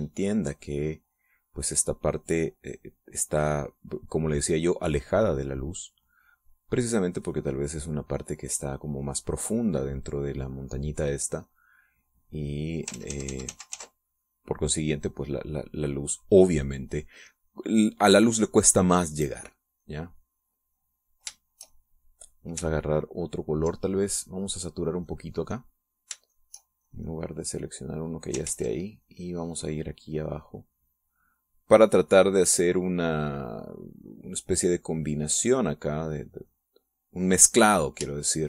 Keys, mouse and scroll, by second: 5.4-12.2 drag, 12.5-13.9 drag, 14.0 ctrl+z, 15.1-16.6 ctrl+drag, 16.6-18.3 ctrl+drag, 18.5 ctrl+click, 18.8-19.9 drag, 20.2-22.3 drag, 22.4 shift+click, 26.0 click, 27.4 shift+click, 27.9-29.2 shift+drag, 29.5 ctrl+z, 30.1-36.5 ctrl+drag, 36.7-38.4 ctrl+drag.